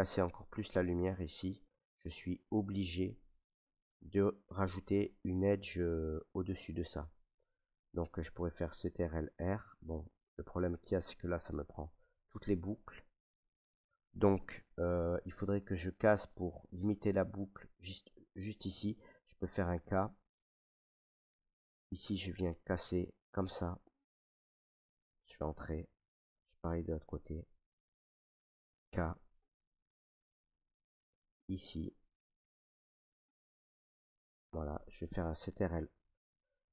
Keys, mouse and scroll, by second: 0.0 middle click, 0.1 Tab, 0.9 Tab, 1.9 middle click, 2.4 middle click, 3.1-3.9 middle drag, 4.0-13.1 middle drag, 9.1 ctrl+r, 13.4-18.6 right drag, 19.8 k, 21.7 click, 24.0 click, 25.2 Return, 27.2 middle click, 28.6 k, 30.4 click, 34.3 click.